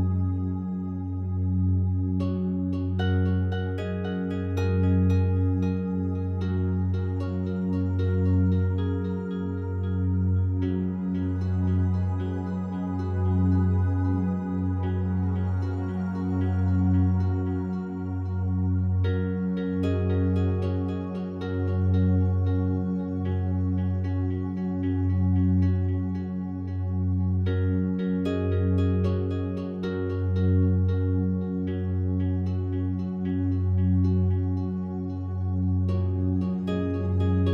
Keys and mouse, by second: 0.0 space, 1.6 /, 2.8 ctrl+s, 3.3-4.2 drag, 4.6 Tab, 5.9-6.9 drag, 7.8 click, 8.9 click, 10.2 KP_2, 10.4 KP_4, 10.7 Return, 15.2 click, 16.2 KP_3, 16.3 KP_6, 16.5 Return, 18.8 F3, 20.1-20.4 typing, 21.9 click, 23.9 alt+shift+click, 25.1 ctrl+alt+click, 25.7 alt+shift+click, 26.9 typing, 28.4 typing, 29.5 Escape, 30.3-32.2 typing, 33.4 f, 34.1 Escape, 35.9 c, 36.6 Page_Up, 36.8-37.5 Page_Up.